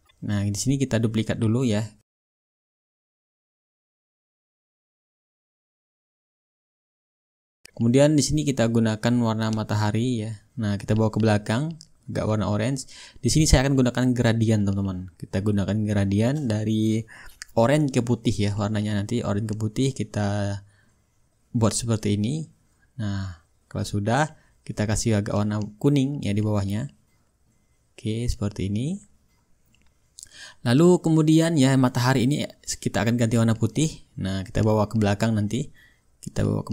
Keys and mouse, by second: 0.4-2.5 right drag, 2.7-3.9 drag, 7.6-8.7 drag, 9.6-14.4 drag, 16.3-17.4 drag, 20.6-24.6 drag, 24.7-29.7 drag, 30.0-31.4 drag, 32.3-33.3 drag, 34.1-35.2 drag, 35.3-36.7 ctrl+shift+drag.